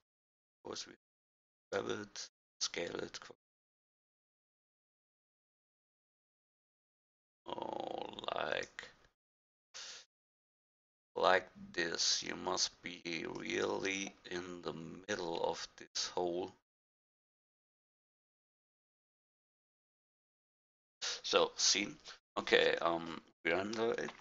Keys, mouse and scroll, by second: 4.4-6.7 drag, 9.7 g, 16.8-22.1 drag.